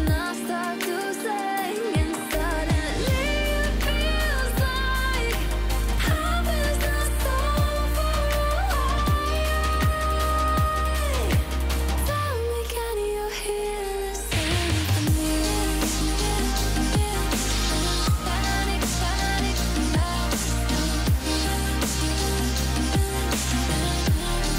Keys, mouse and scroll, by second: 2.8 alt+scroll down 1, 3.0 click, 3.2 alt+scroll up 1, 3.4 click, 3.9 F7, 4.4-5.0 drag, 5.5 shift+Up, 8.1-9.0 alt+shift+click, 10.4-11.3 click, 11.6 Down, 13.4-14.7 drag, 15.5 Down, 17.0 click, 17.8 alt+scroll down 1, 18.3-18.7 alt+scroll up 1, 18.7-19.3 click, 19.8 shift+Up, 20.6 click, 20.9 alt+scroll down 1, 21.2 click, 21.8 F7, 22.6 click.